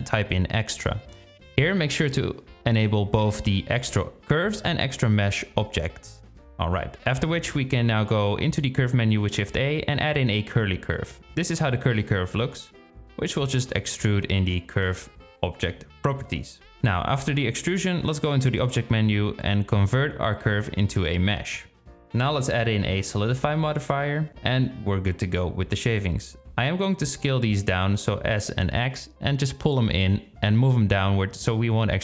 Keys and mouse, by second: 7.1 shift+a, 14.8-16.5 drag, 17.2 middle click, 19.7-23.1 drag, 25.5 click, 26.2-26.8 middle drag, 30.5 s.